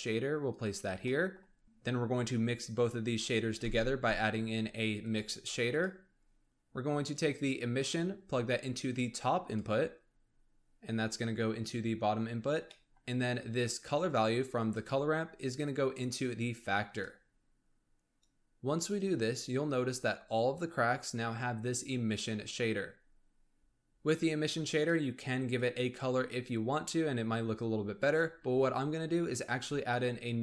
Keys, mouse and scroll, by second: 1.0 middle click, 1.6 shift+a, 3.5 shift+a, 7.1 click, 12.4 scroll down 1, 12.7 middle click, 13.0-15.0 scroll down 1, 15.0 click, 17.3-18.2 scroll up 1, 18.2 click, 22.9-23.4 scroll up 3, 23.4 scroll down 1, 23.6-24.6 scroll up 3, 24.6 click, 29.1-29.8 scroll down 1, 29.8-30.4 middle drag.